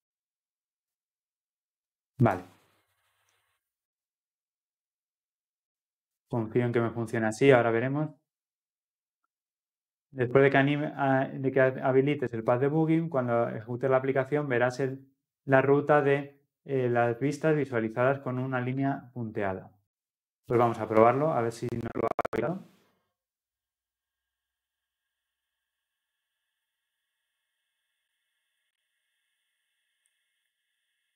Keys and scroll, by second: 21.0 ctrl+F10.